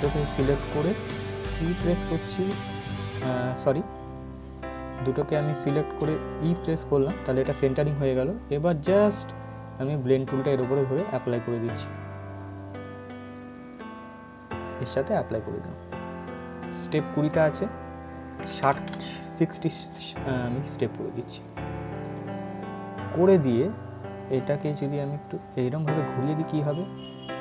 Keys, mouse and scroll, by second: 1.2 c, 2.0 click, 2.9 ctrl+z, 3.3 click, 6.2 e, 6.7-16.5 drag, 21.0-27.4 drag.